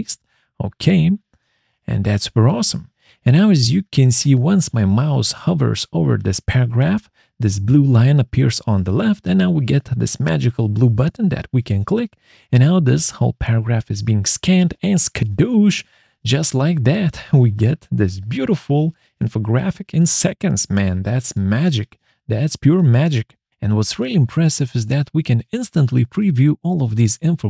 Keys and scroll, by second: 0.8 ctrl+v.